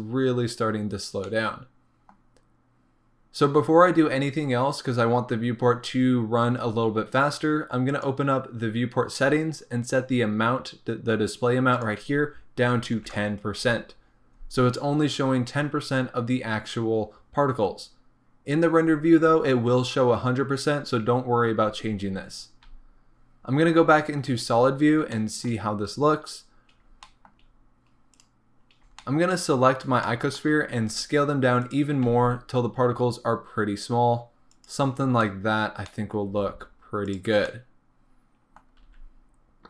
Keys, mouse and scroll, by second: 2.0-13.8 middle drag, 13.8-25.1 drag, 22.1-23.8 scroll down 1, 23.8 z, 24.5 scroll up 1, 25.1-32.1 shift+middle drag, 25.9-26.4 scroll up 2, 26.4-27.0 scroll down 2, 28.3 click, 28.6-29.0 scroll up 2, 29.6-30.1 scroll up 2, 30.8 s, 34.9 middle click, 34.9-35.2 scroll down 1, 35.6-35.9 scroll up 1, 35.9 middle click, 36.4 s, 37.5 middle click, 38.8 s.